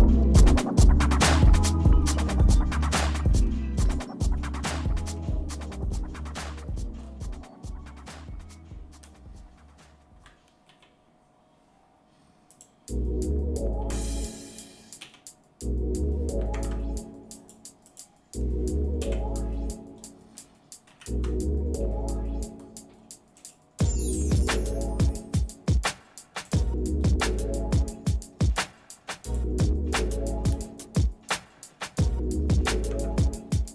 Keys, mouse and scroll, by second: 0.6 shift+middle click, 1.4 middle click, 2.0-3.0 shift+middle drag, 3.2 middle click, 3.7 click, 4.3 shift+middle click, 6.3 Tab, 6.9-7.3 scroll up 2, 10.7 l, 12.5 click, 13.7 l, 15.0 click, 16.5 ctrl+Tab, 17.8 click, 19.0 l, 20.8 ctrl+i, 22.3 scroll down 1, 22.5 scroll up 1, 23.1 scroll up 1, 23.3-25.8 right drag, 26.6-29.6 right drag, 33.0 Tab, 33.4 scroll down 2.